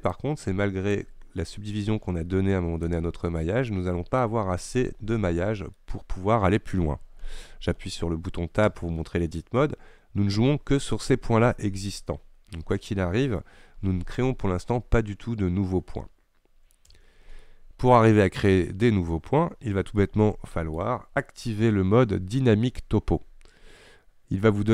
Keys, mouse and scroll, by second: 0.2-3.2 shift+drag, 3.2-3.5 scroll down 1, 3.5 middle click, 4.3-5.4 scroll up 1, 5.4 scroll down 1, 5.8-8.8 middle drag, 8.8 Tab, 17.0 Tab, 17.5-24.7 middle drag.